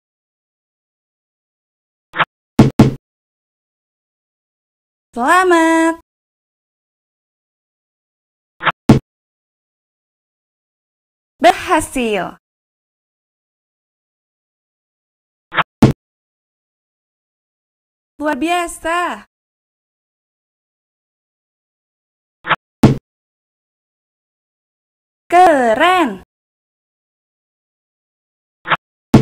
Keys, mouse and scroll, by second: 1.5-3.1 drag, 8.4 click, 15.3 click, 22.1 right click, 28.4-29.2 drag.